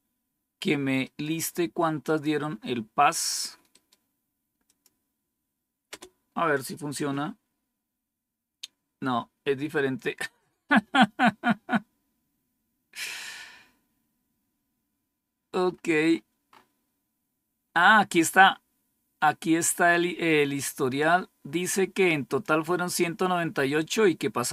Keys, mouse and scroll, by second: 1.0 right click, 2.0 click, 3.7 right click, 4.6 click, 5.8 Return, 15.5 scroll up 2, 20.9-22.4 drag.